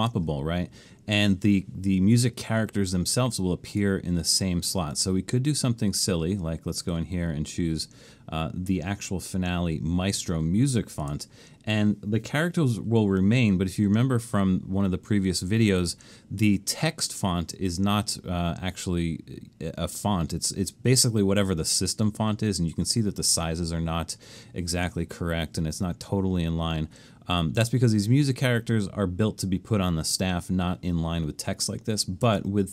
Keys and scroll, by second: 32.3 super+z.